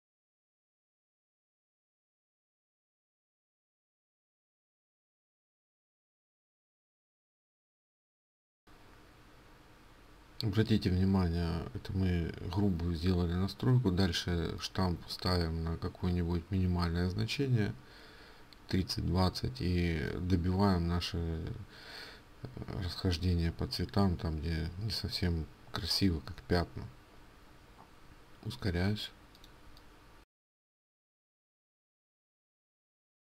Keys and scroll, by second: 0.8 ctrl+alt+z.